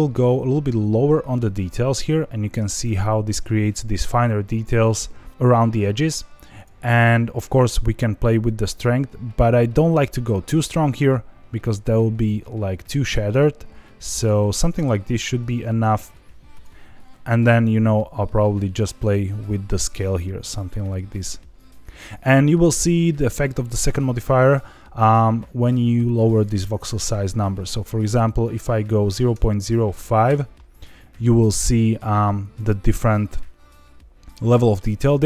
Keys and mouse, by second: 6.6 click, 7.8-14.5 drag, 16.5 click, 17.6-22.0 drag, 26.2-30.7 drag, 33.0-34.7 middle drag.